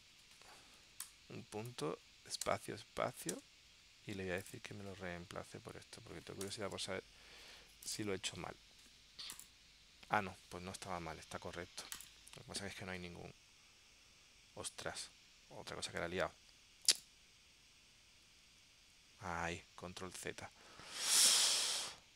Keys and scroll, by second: 16.1 super+z, 18.6 super+z.